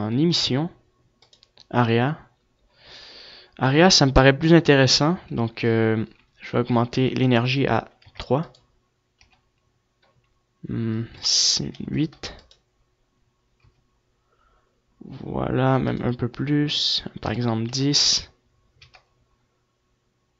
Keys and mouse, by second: 0.5 click.